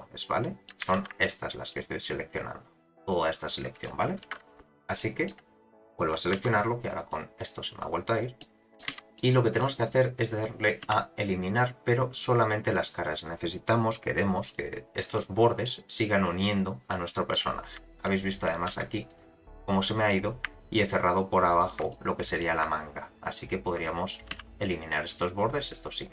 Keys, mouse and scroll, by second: 1.0 shift+h, 1.2-3.9 middle drag, 4.2 alt+h, 5.0 middle click, 6.1 click, 6.3 z, 7.1 click, 8.4 middle click, 8.9 z, 9.1 middle click, 10.8 x, 15.2 middle click, 16.3-17.4 middle drag, 17.6-18.5 scroll up 4, 18.0 middle click, 18.7 2, 19.1 click, 19.6 middle click, 20.8 shift+click, 21.6 shift+click, 21.9 middle click, 23.8 middle click, 24.3 x.